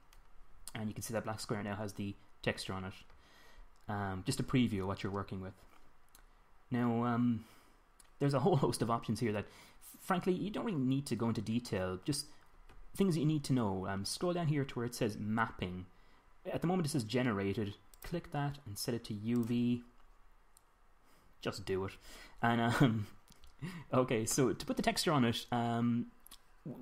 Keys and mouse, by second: 18.5-22.6 drag, 22.6-26.8 middle drag.